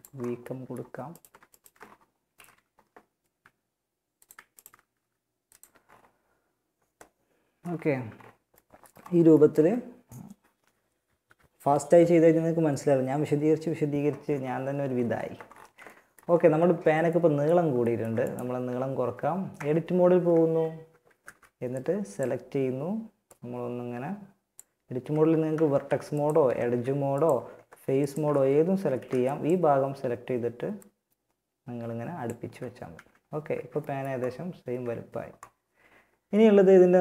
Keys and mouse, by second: 1.0 click, 1.5 KP_1, 2.5 s, 3.9 alt+right click, 4.2 s, 4.8 Tab, 18.8 Tab, 19.4 z, 20.1 a, 20.4 b, 24.7 ctrl+Tab, 25.7 ctrl+Tab, 26.7 ctrl+Tab, 28.0 a, 28.2 b, 31.8 z, 32.2 Tab, 34.0 a.